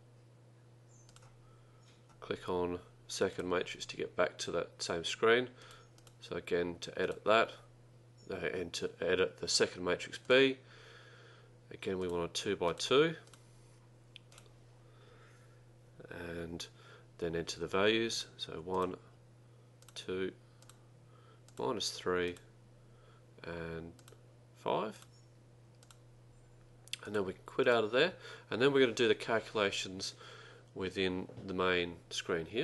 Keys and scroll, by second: 5.7 Right, 6.1 ), 7.1 Down, 10.3 Return, 12.1-13.8 typing, 14.4 Return, 18.3 1, 18.9 Return, 19.9 2, 20.7 Return, 23.9-25.1 typing, 25.9 Return.